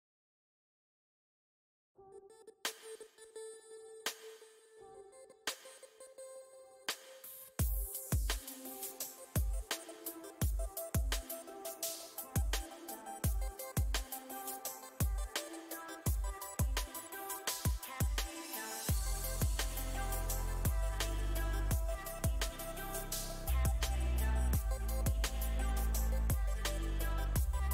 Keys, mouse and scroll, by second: 0.0 space, 0.5 f, 1.1-3.5 drag, 3.5 middle click, 4.3 click, 5.1 middle click, 5.5-8.5 drag, 10.3 middle click, 10.8 click, 11.2 middle click, 11.6 click, 12.4 middle click, 12.8-14.0 drag, 14.0-15.5 middle drag, 15.5 shift+c, 16.1 f, 17.2 middle click, 17.8 f, 18.9 f, 19.6-21.5 drag, 21.5 middle click, 22.0 click, 22.5 middle click, 23.4-25.3 drag, 25.3-26.6 middle drag, 26.6 click, 27.0-27.7 middle drag.